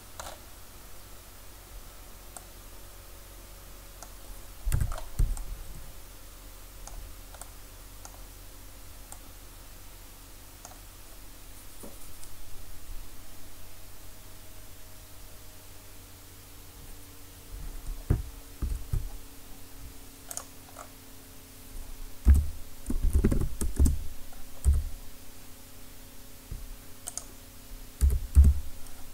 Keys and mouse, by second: 2.5 middle click, 2.7 middle click, 3.7-4.7 middle drag, 4.7 Tab, 18.6 shift+a, 20.8-23.2 middle drag, 22.3 r, 24.7 s, 27.3-29.1 drag, 28.0 s.